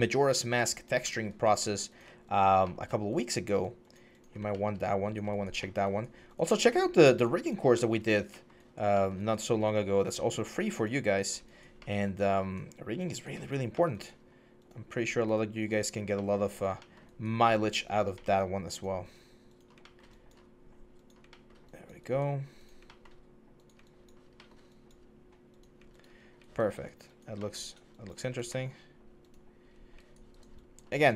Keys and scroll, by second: 25.9 1, 28.5 4, 29.5 1.